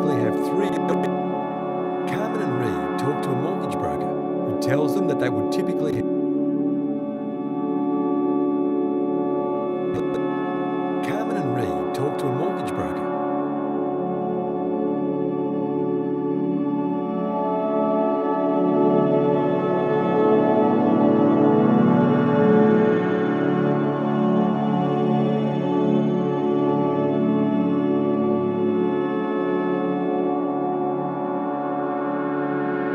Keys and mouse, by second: 0.6 space, 0.8-1.6 drag, 1.3 space, 5.9 space, 6.9 ctrl+s, 7.9-12.9 drag, 10.2 space, 13.3 space, 14.2 click, 14.8 click, 15.7 click, 16.9 click, 17.4 click, 18.4 a, 19.7 click, 19.7 typing, 22.1-25.8 typing, 28.4 click, 28.8 click, 29.7 ctrl+s, 30.0 alt+a, 30.6 ctrl+alt+click, 32.8 click.